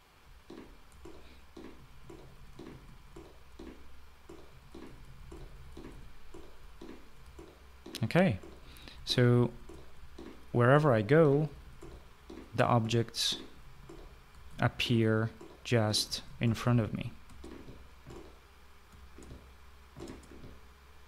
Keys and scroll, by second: 0.9-6.6 typing, 8.1-14.3 typing, 15.4-17.9 typing, 19.5 space, 20.6 space.